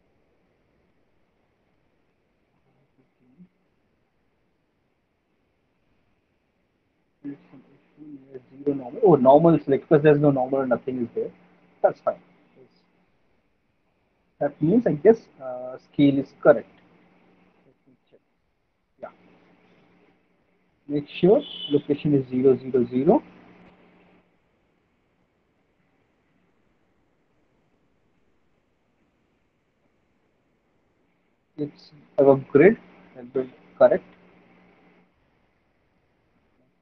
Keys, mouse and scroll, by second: 13.1 click, 16.8 click, 19.3 click, 21.3 click, 21.9 click, 24.0 alt+click, 25.3 alt+middle click, 27.0 alt+click, 27.8 alt+right click, 29.7 alt+middle click, 31.7 alt+click, 33.2 alt+right click, 34.3 alt+middle click, 35.6 alt+right click.